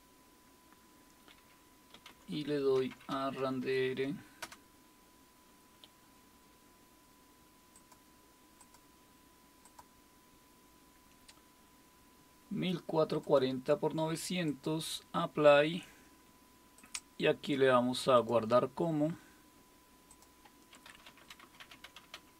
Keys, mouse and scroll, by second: 1.7-3.9 typing, 4.4 Return, 7.7-9.2 drag, 9.6 click, 13.2-21.1 drag, 20.5-22.3 typing.